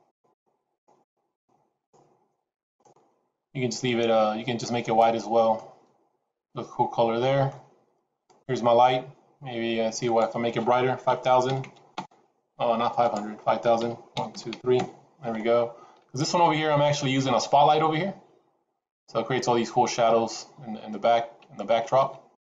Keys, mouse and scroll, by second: 5.5 middle click, 8.2 click, 10.0 click, 11.6 KP_0, 12.9 click, 14.2 KP_0.